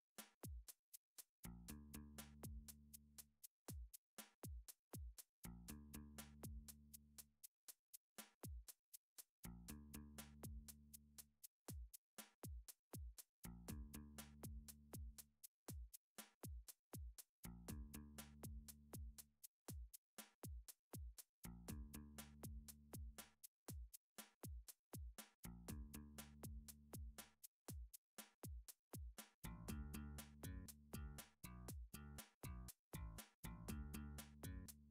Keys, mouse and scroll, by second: 1.0 alt+click, 2.0 r, 4.3 click, 5.1 ctrl+r, 5.5 click, 6.2 click, 7.9 3, 9.7 alt+click, 10.6 s, 10.7 z, 11.7 click, 12.2 s, 12.2 g, 14.4 click, 14.9 alt+click, 15.6 g, 16.1 g, 17.1 right click, 18.5 s, 19.0 z, 19.6 right click, 20.3 s, 20.6 z, 21.8 s, 21.9 z, 22.0 s, 22.0 click, 22.4 g, 24.1 click, 24.7 alt+click, 25.8 s, 26.5 z, 28.0 click, 28.5 g, 28.8 z, 29.8 click, 30.6 s, 30.9 z, 31.9 click, 31.9 s, 32.6 g, 33.9 click.